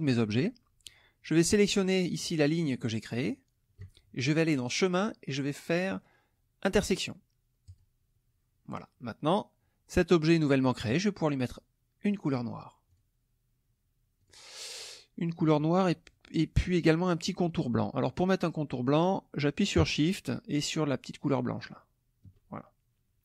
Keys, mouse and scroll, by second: 3.2 shift+click, 4.5 click, 7.6 click, 12.9 click, 14.2 click, 15.3 click, 21.6 shift+click.